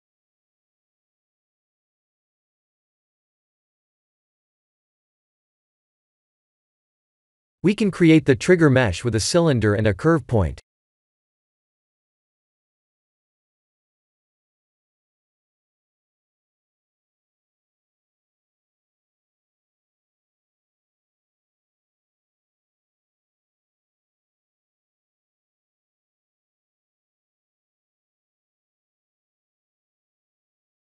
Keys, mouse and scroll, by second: 0.6 shift+middle click, 2.1 middle click, 5.6 shift+middle click, 6.5-7.5 scroll down 2, 7.8 middle click, 8.1 middle click, 8.3 middle click, 8.8 KP_1, 9.3 KP_3, 10.3 scroll up 2, 10.6 click, 11.1 shift+a, 24.5 s, 26.3 g, 29.2 click, 29.6 middle click, 30.7 click.